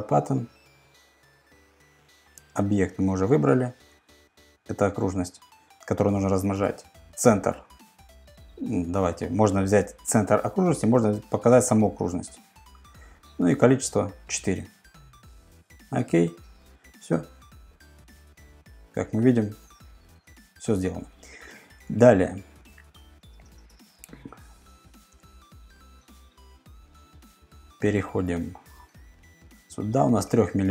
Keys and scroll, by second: 21.8 super+Tab, 22.8 super+Tab, 23.5 super+Tab.